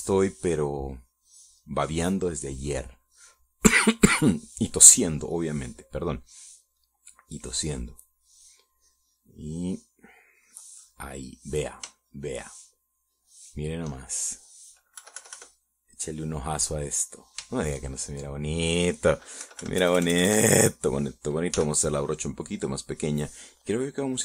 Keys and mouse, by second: 0.9-4.6 drag, 6.7-8.2 drag, 8.2 middle click, 9.0-10.0 drag, 10.3 middle click, 11.2-12.7 drag, 12.8 middle click, 13.3-14.5 shift+middle drag, 14.6-15.8 shift+middle drag, 16.4 KP_Subtract, 17.2 middle click, 17.9 middle click, 18.9 shift+middle click, 20.8 KP_Subtract, 21.2 KP_Add, 22.9 f, 23.8 click.